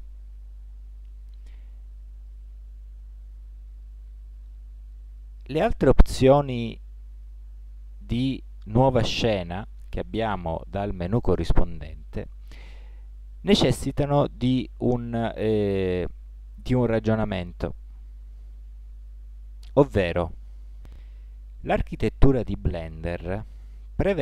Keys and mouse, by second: 21.0 KP_1, 23.4 KP_Decimal.